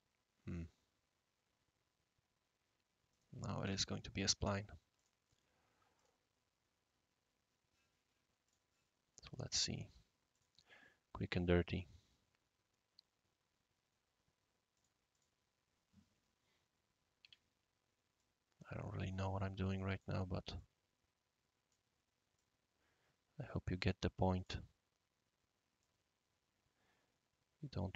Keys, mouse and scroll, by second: 3.1 click, 3.6 Delete, 4.9 click, 5.9 click, 8.4 click, 10.3 click, 14.7 click, 15.1 click, 16.1 scroll up 1, 16.2 scroll down 1, 16.5-16.9 scroll up 2, 17.0 scroll down 1, 17.2 Escape, 18.1-20.0 drag, 20.5-21.7 drag, 22.3-24.5 drag, 25.8-27.9 drag.